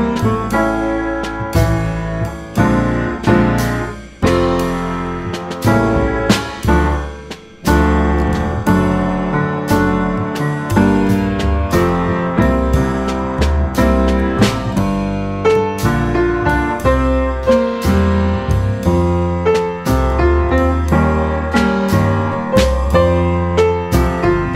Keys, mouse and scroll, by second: 0.2 shift+click, 0.4-0.8 shift+drag, 0.9-1.2 shift+drag, 1.4 shift+click, 2.0 shift+drag, 2.7 shift+click, 2.9 shift+click, 3.8 shift+click, 4.0 shift+click, 4.6 middle click, 5.6 ctrl+b, 7.9 Tab, 8.2 middle click, 8.4 Tab, 9.4 Tab, 10.1 ctrl+2, 10.8 middle click, 11.3 Tab, 12.4-15.4 middle drag, 15.4 click, 16.2 shift+click, 16.6-16.9 shift+drag, 17.2 shift+click, 17.4 shift+click, 17.6 shift+click, 17.9 shift+click, 18.1 shift+click, 18.4 shift+click, 18.8 shift+click, 19.0 shift+click, 19.3 shift+click, 19.6-21.6 right drag, 22.9 middle click, 23.5 scroll down 2, 23.8-24.5 middle drag.